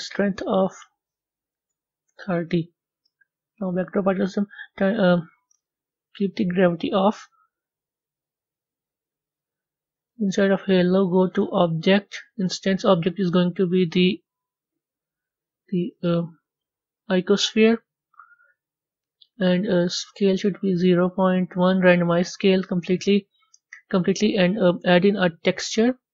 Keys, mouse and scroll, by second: 2.0-3.7 drag, 11.3-17.7 drag, 19.9-26.1 drag.